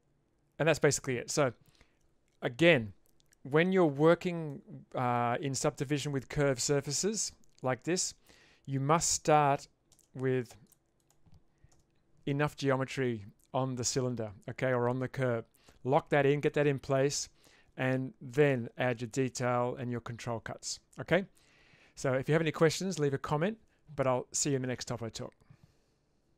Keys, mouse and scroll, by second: 4.5-5.2 middle drag, 9.3 click, 10.0 space, 11.8 Tab.